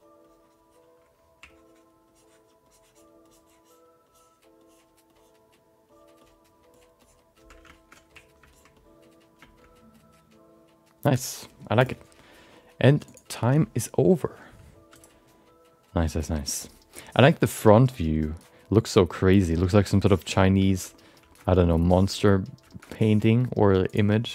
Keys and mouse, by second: 1.8-7.4 ctrl+drag, 7.7 alt+shift+middle click, 8.1 ctrl+click, 8.5 ctrl+alt+middle click, 8.8 alt+middle click, 9.6-11.0 alt+middle drag, 13.2-17.7 drag, 20.8 shift+middle click, 20.9 middle click, 21.3 shift+middle click, 21.4 middle click, 22.0 shift+middle click, 22.1 middle click, 22.7 shift+middle click.